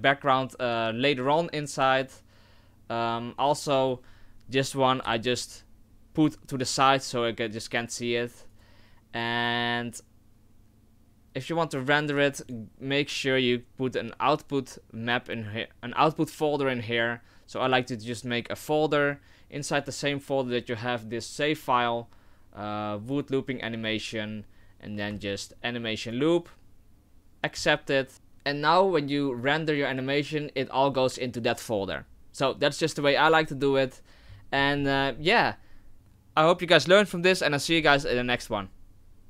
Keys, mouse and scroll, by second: 4.6 right click, 5.8 g, 8.9 right click, 13.6 click, 17.6 click, 28.1 click, 29.4 click.